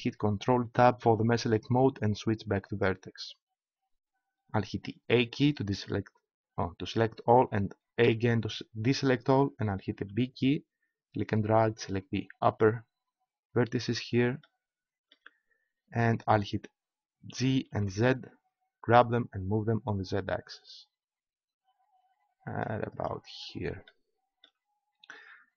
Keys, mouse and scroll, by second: 0.7 ctrl+Tab, 5.1 a, 8.0 a, 9.9 b, 17.3 g, 23.4-24.6 drag, 25.3 middle click.